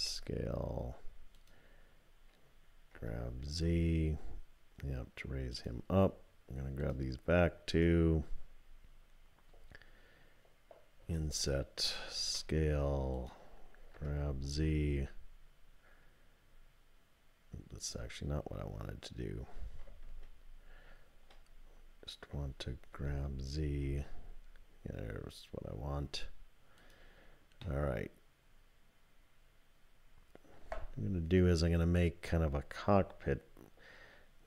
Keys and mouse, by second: 2.9 g, 7.7 shift+click, 11.0 i, 12.2 s, 13.9 g, 20.1 ctrl+z, 21.1 ctrl+z, 22.9 g, 27.6-30.5 drag.